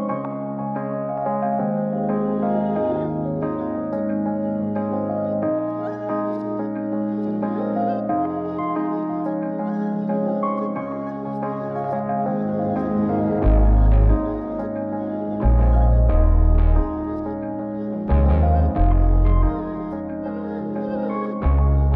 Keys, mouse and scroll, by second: 1.7-9.1 drag, 9.2 middle click, 10.6 click, 11.5 click, 13.1 g, 15.3 KP_Decimal, 15.9 scroll down 2, 16.2 middle click, 16.6 middle click, 16.6 scroll down 1, 16.8 g.